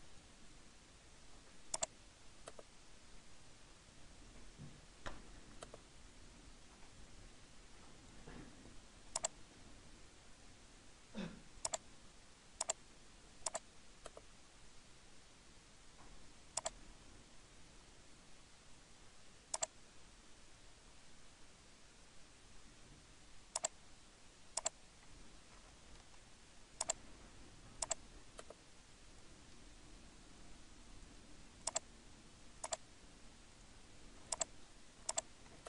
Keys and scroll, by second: 15.5 Escape, 25.6 Return.